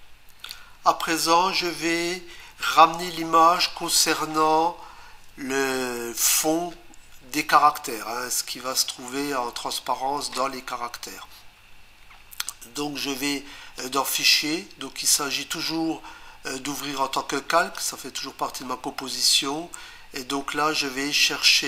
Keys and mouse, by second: 13.8 click, 17.2 click.